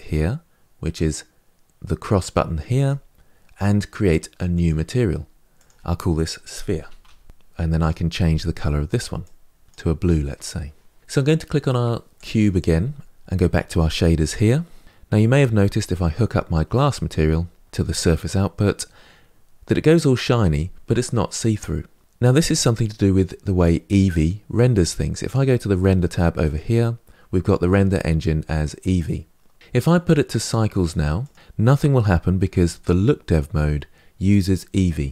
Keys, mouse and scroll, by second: 2.7-7.3 drag, 7.9 click, 12.0 click, 17.7 click, 31.1 click.